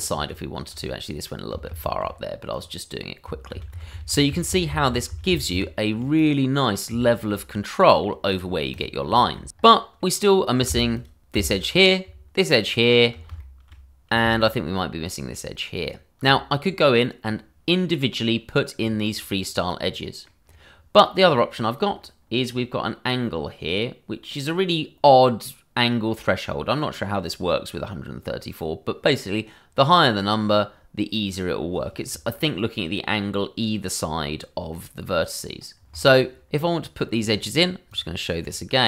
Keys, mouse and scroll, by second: 0.1 ctrl+z, 1.7 ctrl+z, 2.5 click, 3.5 ctrl+z, 6.1 click, 6.5 middle click, 7.2 shift+middle click, 7.4-7.8 scroll up 1, 7.8 middle click, 8.3 click, 8.8 double click, 9.1 shift+middle click, 9.4 scroll up 1, 9.7 shift+middle click, 10.0 click, 10.2 scroll up 1, 11.1 alt+click, 11.9 click, 12.6 alt+shift+click, 12.9 click, 13.4 shift+middle click, 13.5 middle click, 13.6 shift+middle click, 15.7 alt+shift+click, 16.1 click, 16.4 scroll down 1, 19.0 click, 19.4-19.8 scroll down 1, 19.8 middle click, 20.4-20.8 scroll up 1, 21.5-21.8 scroll, 35.9 click.